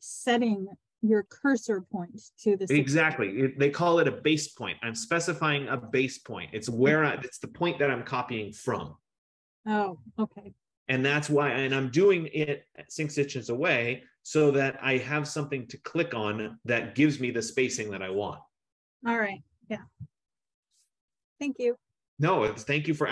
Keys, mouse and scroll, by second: 21.8 click.